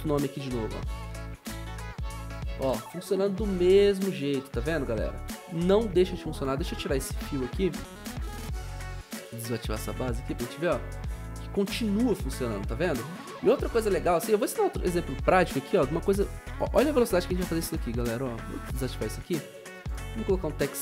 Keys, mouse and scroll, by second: 0.3-3.1 typing, 10.4-11.4 scroll up 2, 14.2 o.